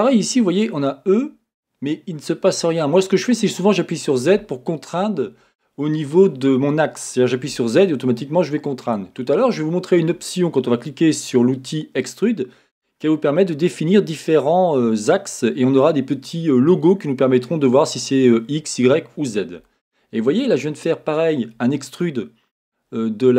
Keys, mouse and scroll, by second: 8.9 click, 12.8-23.3 middle drag.